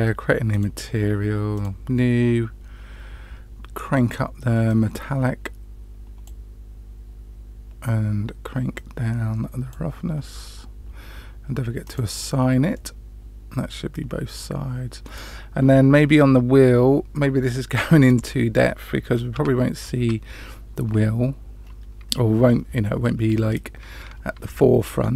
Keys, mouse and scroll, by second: 0.5 click, 1.5 click, 5.0-6.3 drag, 8.7-9.7 drag, 11.8 click, 12.7-15.0 middle drag, 18.1-19.3 scroll up 1, 19.3 Tab, 20.0 Tab, 21.6-23.0 scroll up 3.